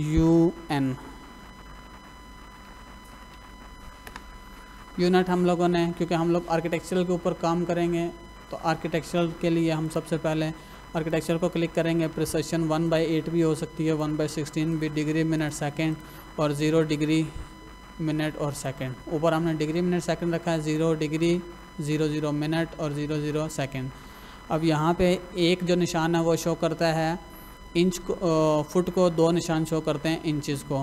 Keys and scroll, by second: 0.0-3.4 typing, 4.0 Return.